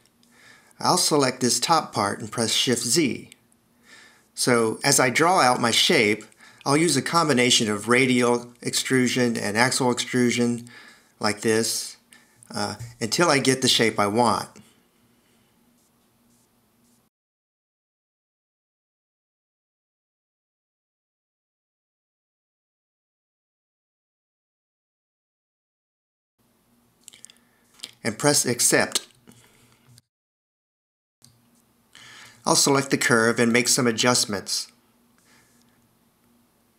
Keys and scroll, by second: 3.0 shift+z, 28.6 Return, 30.9 a, 36.4 0.